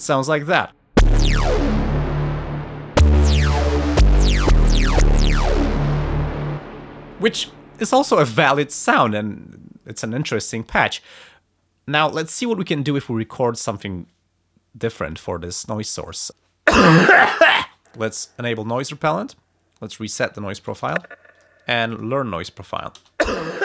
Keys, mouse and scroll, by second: 0.3 click, 0.9 space, 6.5 space, 16.0 click, 18.1 click, 20.1 click, 20.7 space, 21.3 click, 21.8 click, 23.0 space.